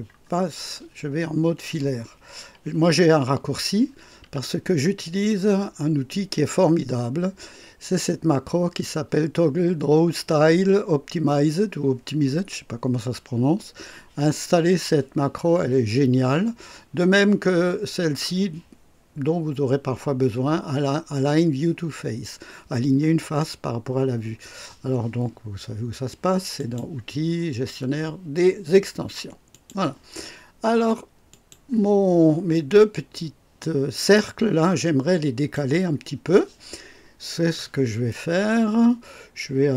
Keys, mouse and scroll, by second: 4.2 &, 26.5 click, 29.5 click, 31.2 click, 32.5-34.3 drag, 34.5-35.7 drag.